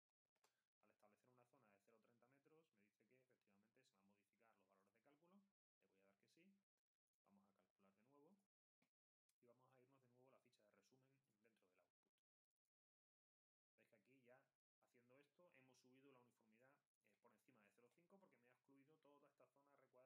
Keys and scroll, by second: 0.0-0.7 typing.